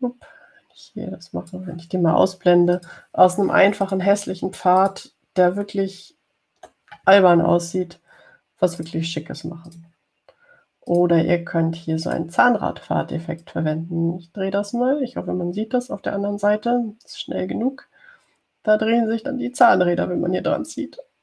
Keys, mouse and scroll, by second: 0.7-3.0 drag, 4.0 click, 5.1 click, 6.0 click, 6.9-7.2 ctrl+scroll up 2, 10.0 click, 10.9 click, 12.1 click, 13.3 click, 14.7-21.2 drag.